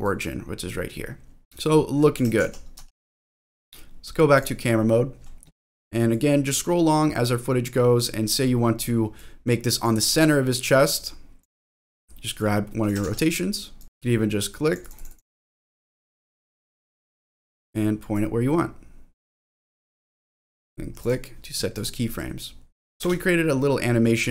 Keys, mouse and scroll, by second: 0.0-2.1 drag, 1.4 ctrl+z, 2.4 ctrl+z, 2.8 ctrl+z, 4.4 click, 6.6-8.3 drag, 9.1 click, 10.4-11.7 drag, 12.4 click, 13.5 ctrl+z, 13.8 click, 14.7 click, 14.9 click, 15.1 click, 15.6-17.6 drag, 18.1-19.9 drag, 20.5 click, 21.0 click, 21.7 click, 22.4 click, 23.1 space.